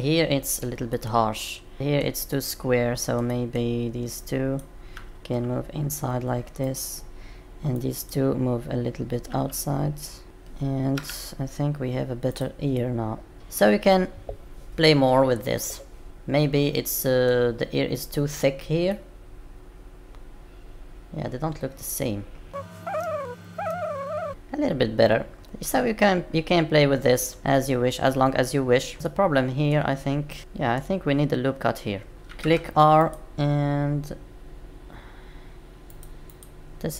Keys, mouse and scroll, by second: 0.9 middle click, 10.2 click, 10.2-10.9 scroll down 2, 10.9 Tab, 12.2 click, 12.7 middle click, 18.8 middle click, 27.4 middle click, 27.4 scroll down 3, 28.9 scroll up 3, 29.1 middle click, 30.4 Tab, 30.4 middle click, 30.9-31.3 scroll down 2, 36.4 click.